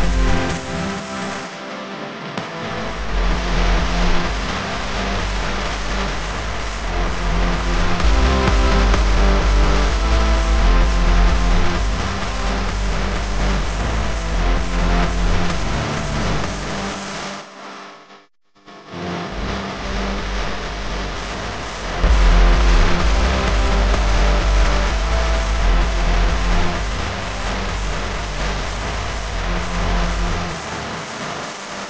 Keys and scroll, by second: 1.0 super+c, 2.0 super+f, 3.3 Right, 7.9 space, 8.4 space, 9.4 Tab, 9.9 space, 10.4 space, 11.6 a, 14.6 v, 18.5 a.